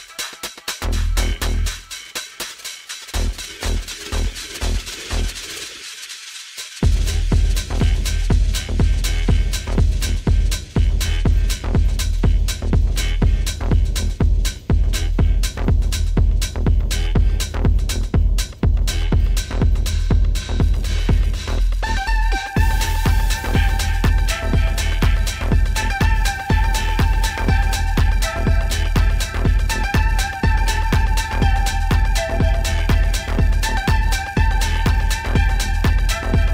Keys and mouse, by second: 1.5-2.5 drag, 3.7 click, 5.4-6.6 drag, 8.8 click, 22.5-24.3 drag, 25.7 click, 27.1 click, 27.8 click.